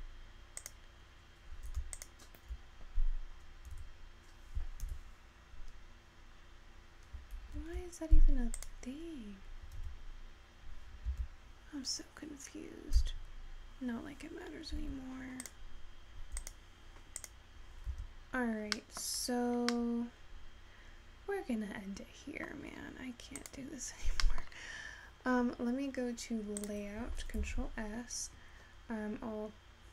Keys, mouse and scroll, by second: 18.9-19.2 middle drag, 19.9-22.9 middle drag, 27.2 Left, 28.8-29.9 scroll up 3.